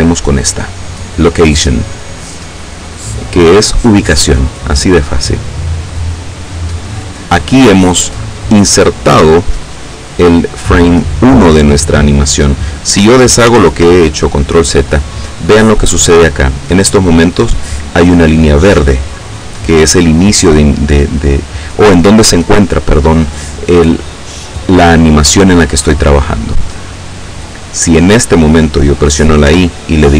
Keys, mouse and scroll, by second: 3.5 click, 13.4 ctrl+z, 29.3 i.